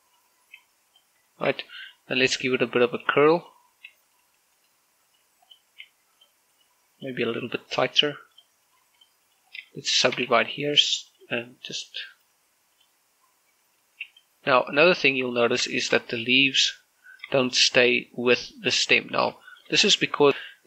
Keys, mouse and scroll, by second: 0.2 g, 0.5 click, 0.9 right click, 1.3 g, 1.7 click, 2.1 shift+middle click, 2.3-2.7 scroll up 1, 2.7-9.6 typing, 3.1 click, 3.7 click, 4.2 click, 4.9 click, 5.3 click, 5.9 right click, 6.3 click, 6.5 right click, 6.9 click, 7.3 right click, 7.7 click, 8.1 right click, 8.5 click, 8.7 right click, 9.1 click, 9.5 right click, 9.7 click, 10.1 right click, 10.3 scroll down 1, 10.5 shift+middle click, 10.9 shift+right click, 11.1 w, 11.5 click, 11.9 right click, 12.0 g, 12.6 click, 12.9 right click, 13.1 g, 13.5 click, 14.3 right click, 14.5 g, 14.7 click, 15.3 Tab, 15.7 middle click, 16.2 scroll up 1, 16.5 shift+middle click, 18.2 shift+middle click, 19.9-20.5 scroll down 3.